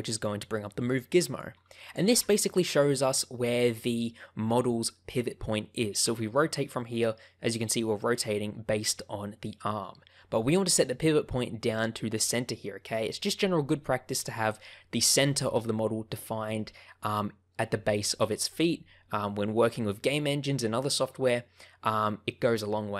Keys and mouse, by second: 1.3 click, 2.1 ctrl+z, 6.0 r.